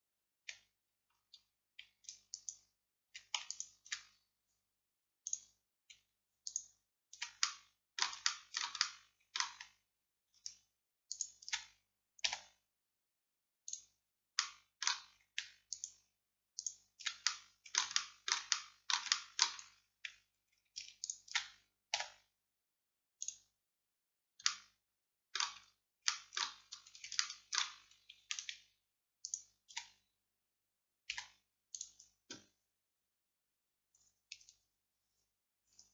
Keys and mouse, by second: 2.9-11.2 middle drag, 12.3 x, 15.8-18.2 middle drag, 22.0 x, 22.8-23.9 right drag, 23.9 middle click, 24.5-26.6 drag, 26.6 middle click, 26.7 click, 29.3-31.2 drag, 31.2 x.